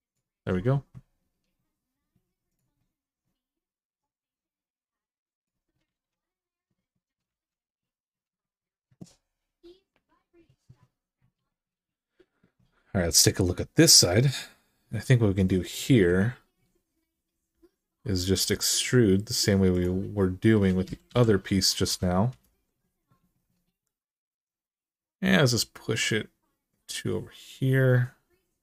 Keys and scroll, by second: 5.7 alt+z, 7.1 alt+z, 15.0 2, 18.1 e, 20.6 s, 20.9 x, 21.7 0, 21.7 -, 22.1 Return.